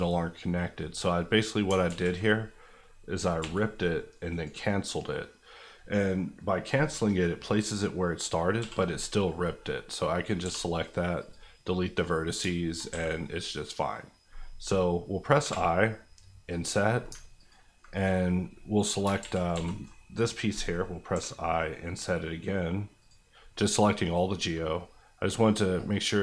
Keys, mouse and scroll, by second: 1.8 ctrl+z, 3.4 v, 4.3 right click, 8.6 l, 9.4 middle click, 10.4 x, 11.2 click, 11.6 middle click, 12.9 a, 13.1-15.0 middle drag, 15.4 i, 16.5 click, 19.2 ctrl+z, 21.1 i, 23.0 click, 23.5 middle click, 24.8 scroll up 1.